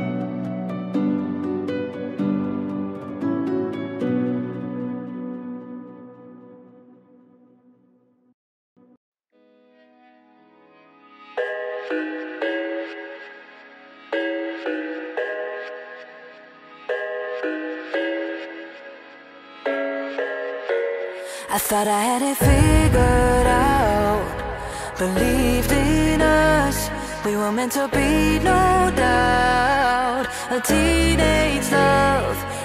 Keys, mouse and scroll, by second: 2.4 KP_1, 3.0 alt+middle click, 3.6 shift+middle click, 4.5 alt+middle click, 5.3 KP_1, 9.4 Tab, 10.0 z, 11.3 ctrl+KP_Add, 12.4 ctrl+KP_Add, 13.2 KP_1, 13.4 z, 14.1 s, 15.3 z, 16.1 z, 16.5 s, 17.9 a, 18.0 Tab, 18.3 z, 18.6 z, 19.0 Tab, 20.1-26.3 drag, 20.1 s, 20.9 s, 22.3 g, 23.2 s, 23.8 a, 24.0 Tab, 24.4 a, 27.6 KP_1, 29.4 Delete, 30.1 KP_1, 30.7 r.